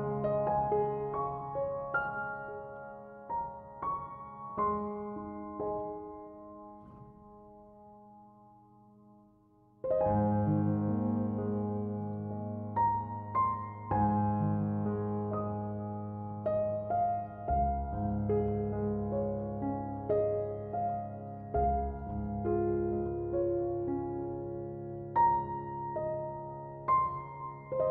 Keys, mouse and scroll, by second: 0.0-2.5 drag, 4.7-5.9 drag, 6.3 click, 8.1 shift+s, 10.2-12.0 shift+middle drag, 12.0-15.0 drag, 16.0 x, 17.6-20.6 drag, 22.5 KP_Decimal, 23.2-23.7 scroll down 1, 23.7-24.4 middle drag, 24.4-24.8 scroll down 1, 24.8-25.5 middle drag, 25.5 s, 26.6 s.